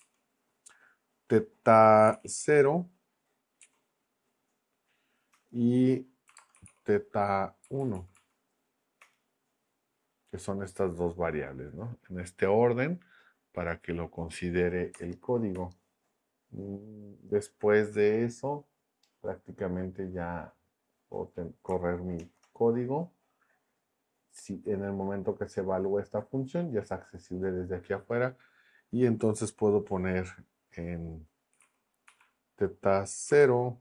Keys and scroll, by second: 2.1 t, 3.6 Down, 5.3 Return, 6.0-7.2 typing, 7.6 Down, 9.0 Return, 14.9 BackSpace, 22.2 shift+Return, 31.3-33.8 typing.